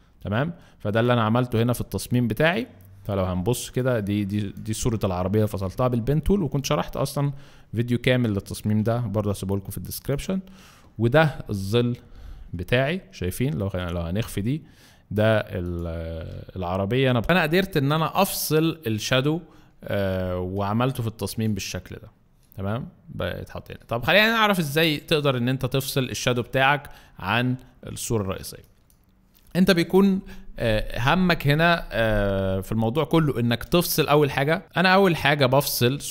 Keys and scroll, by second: 3.2 alt+space, 4.1 alt+space, 28.3 alt+space.